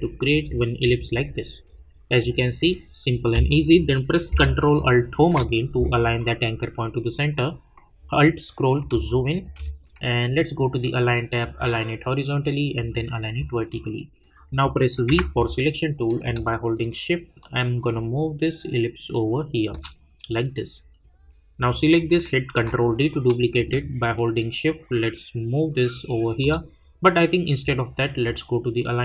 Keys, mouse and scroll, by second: 7.9-8.8 alt+scroll up 1, 9.1 click, 9.4 space, 11.4 click, 16.2-21.5 drag, 17.2 shift+click, 17.6 shift+click, 23.5-28.8 drag.